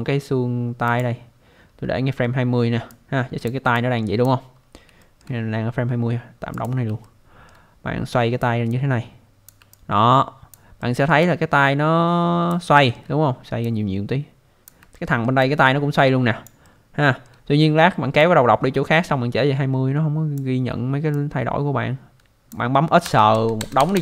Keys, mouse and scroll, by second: 0.9 click, 1.8 scroll up 1, 2.9 click, 3.7 alt+click, 4.6 scroll up 1, 5.0 alt+middle click, 6.6 click, 7.1 alt+middle click, 8.4 click, 9.7 alt+click, 10.8 alt+middle click, 11.2 alt+click, 12.7 alt+middle click, 13.6 click, 14.9 alt+middle click, 15.4 alt+click, 16.6 alt+middle click, 18.2 click, 21.1 click, 23.0-23.9 typing.